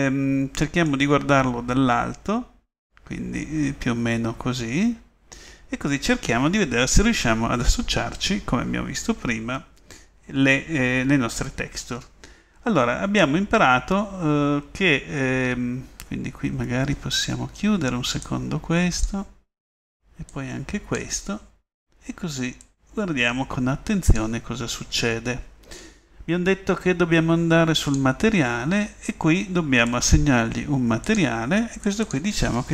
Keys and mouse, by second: 1.3-1.7 middle drag, 1.7 middle click, 1.9-2.3 middle drag, 2.4 middle click, 2.7 middle click, 2.9 middle click, 3.1-4.5 middle drag, 20.0 middle click, 20.9 middle click, 22.7 middle click, 23.4 middle click, 23.7 middle click, 28.0-31.2 drag, 32.4-32.7 middle drag.